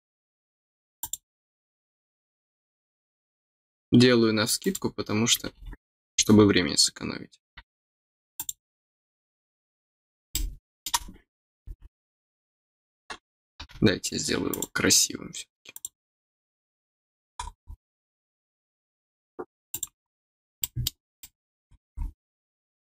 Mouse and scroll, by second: 0.9 click, 4.5 click, 6.3 middle click, 6.3 scroll up 1, 8.3 click, 10.3 middle click, 14.4 click, 15.7 click, 17.3 scroll up 1, 17.6 scroll down 1, 17.7 scroll up 1, 17.8 scroll down 1, 17.9-19.6 middle drag, 19.6 click, 20.3 middle click, 20.5 middle click, 21.1 middle click.